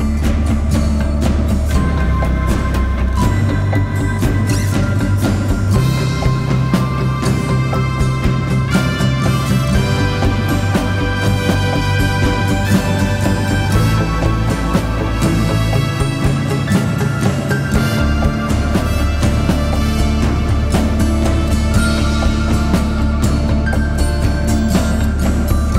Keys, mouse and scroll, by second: 1.3 alt+click, 2.3 alt+click, 7.2 right click, 8.1 click, 10.9-11.2 scroll up 1, 11.2-13.9 typing, 11.4 click, 11.9 click, 12.3 click, 12.9 click, 13.3 click, 13.3 click, 14.2 click, 15.0-15.8 scroll up 1, 15.8-17.9 drag, 18.4-19.2 typing, 18.9 click, 21.3 typing, 23.2-23.5 scroll down 1, 24.6 click.